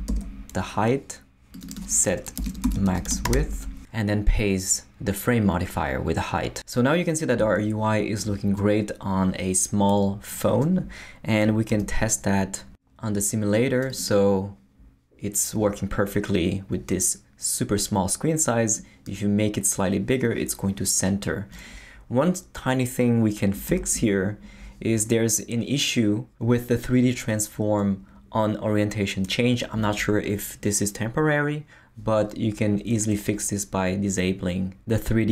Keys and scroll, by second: 0.1 Delete, 2.1-3.8 typing, 4.8 Return, 5.2 super+v, 11.7 super+r, 23.7 super+Left.